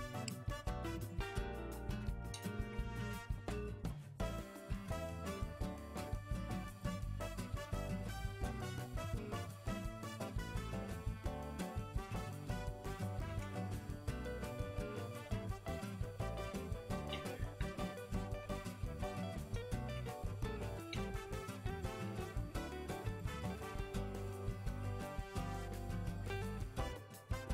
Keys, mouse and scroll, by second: 0.2 g, 1.1 middle click, 1.5 g, 7.1-7.6 middle drag, 7.6-8.1 scroll up 2, 8.1-8.7 middle drag, 8.7 Tab, 10.1 ctrl+z, 11.9 ctrl+KP_Add, 12.5-15.6 middle drag, 17.7 ctrl+z, 18.6 g, 23.5 ctrl+z, 23.8 ctrl+z, 26.1-26.5 middle drag, 26.5 scroll down 3, 26.6-27.1 middle drag, 27.1-27.5 scroll up 2.